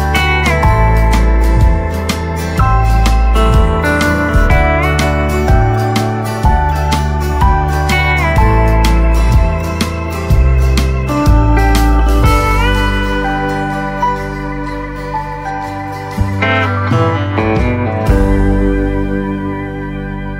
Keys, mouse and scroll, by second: 0.2 scroll down 1, 1.3 right click, 1.8-2.2 scroll down 1, 2.4 right click, 3.8 click, 3.8 typing, 6.7 scroll up 1, 9.2 click, 11.4-12.2 scroll down 1, 12.9 click, 13.5 right click, 14.3-17.0 drag, 17.6-19.9 right drag, 19.9 click.